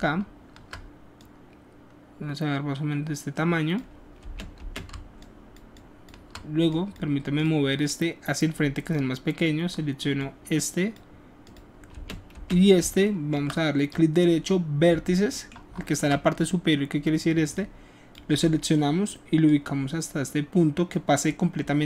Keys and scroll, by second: 4.6 space, 12.0 space, 12.3 space.